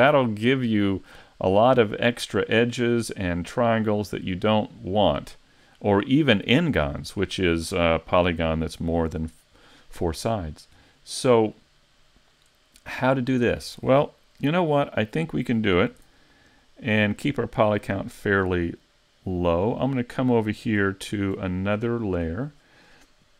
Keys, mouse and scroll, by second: 4.9 middle click, 13.9-14.5 scroll down 1, 14.5 shift+middle click, 14.9 middle click, 15.9 s, 16.7 middle click, 17.7 shift+middle click, 20.0 click, 20.9 shift+middle click, 21.5-22.0 scroll up 4, 22.0 shift+middle click.